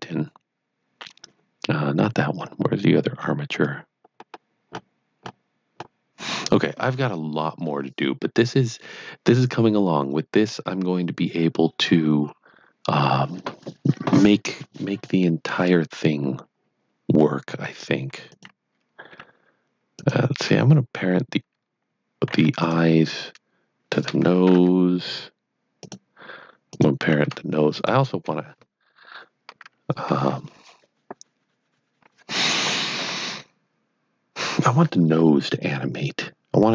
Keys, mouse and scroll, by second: 2.5-2.8 scroll down 1, 3.3 scroll down 1, 5.2 scroll up 5, 7.8 scroll up 1, 18.2 scroll up 6, 18.3 click, 22.6 shift+click, 25.8 click, 27.7 click.